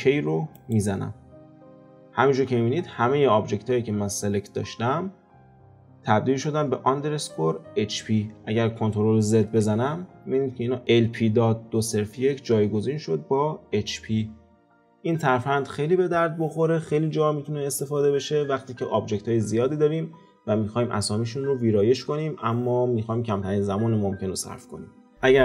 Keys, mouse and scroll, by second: 2.3-5.3 scroll down 2, 9.6 ctrl+z.